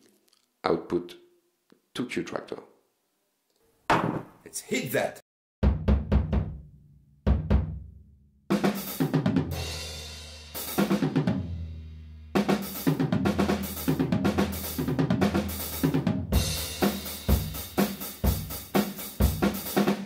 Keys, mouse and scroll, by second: 0.8-2.2 drag, 3.6 click.